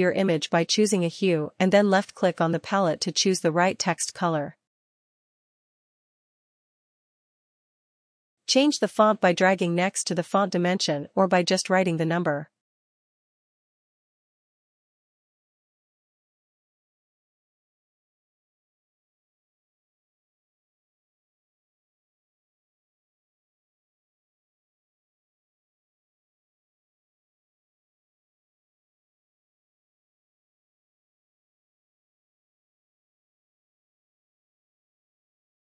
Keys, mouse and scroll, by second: 5.2 click, 5.8 click, 7.4 click, 9.1 click, 13.9 click, 14.0 click, 14.8 click, 15.6 click, 15.7 click, 16.6-17.7 typing, 19.1 click, 19.7 click, 20.6-21.3 typing, 21.4 Return, 31.4 click, 33.1 ctrl+z, 33.1 click.